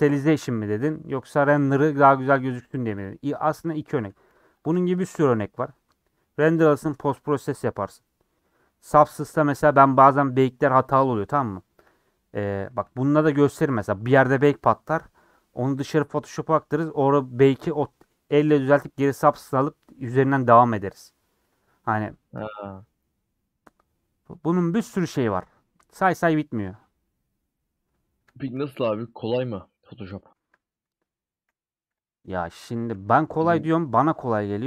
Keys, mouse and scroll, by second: 1.5 middle click, 2.1-2.7 scroll up 2, 3.1 click, 3.9 click, 4.7 shift+click, 12.0-12.5 scroll down 2, 12.5 a, 25.8 /, 26.4 Tab, 26.6 middle click, 27.2-27.5 scroll up 3, 27.5 middle click, 27.9-28.2 scroll up 3, 28.3 shift+middle click, 28.6 scroll down 2, 28.9-29.9 middle drag, 29.9 scroll up 1, 30.1-31.4 shift+middle drag, 31.4 h, 32.9 /, 33.1 middle click, 33.8 Tab, 34.2 middle click.